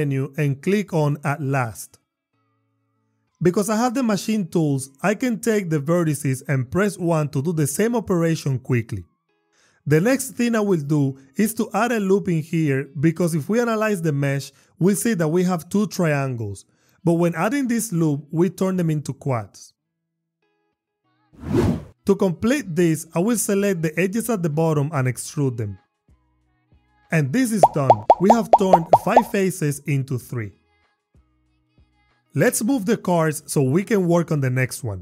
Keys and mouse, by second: 0.1 m, 5.1 click, 6.3 shift+click, 7.6 1, 8.9 click, 10.0 ctrl+r, 12.5-12.9 drag, 14.0 click, 14.9 click, 16.1 click, 18.3 ctrl+r, 18.9 click, 19.5 click, 21.6 Tab, 21.6 click, 24.6 e, 25.9 y, 27.8 click, 31.5 Tab, 33.2 g, 33.6 x, 34.6 click.